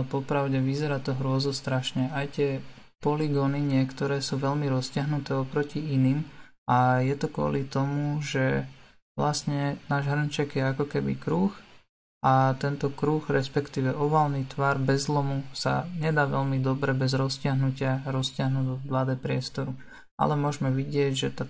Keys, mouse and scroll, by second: 1.8 click, 5.3 Tab, 6.1-17.3 middle drag, 17.3 Tab, 20.6 click.